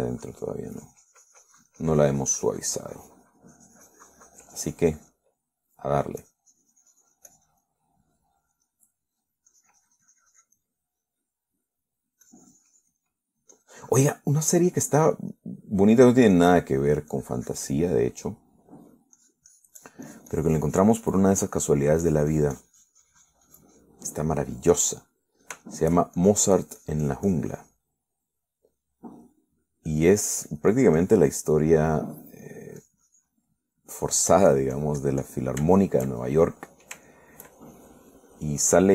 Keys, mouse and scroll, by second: 0.2 shift+middle click, 1.1-7.3 shift+drag, 6.5 right click, 7.5-9.1 drag, 9.1 middle click, 10.8-13.4 drag, 12.0-13.4 middle drag, 13.5-15.5 drag, 14.3-16.0 middle drag, 16.6 click, 18.1 click, 18.4 click, 19.2-20.4 middle drag, 20.4-22.8 drag, 22.8 middle click, 23.3-25.3 drag, 25.3 middle click, 26.4 middle click, 26.9 shift+middle click, 27.4-29.2 shift+drag, 29.5 middle click, 30.5 middle click, 31.1-32.8 drag, 31.8-32.8 middle drag, 32.9 middle click, 34.0-35.2 drag, 34.7 middle click, 35.3-36.8 drag, 37.0-38.2 shift+middle drag, 38.3 shift+middle click.